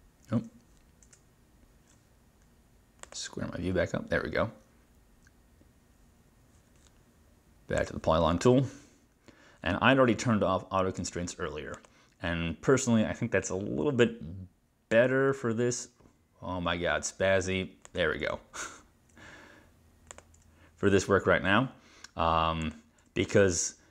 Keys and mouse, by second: 3.1 click, 7.8 click, 11.8 click, 17.9 click, 20.2 click, 22.7 click.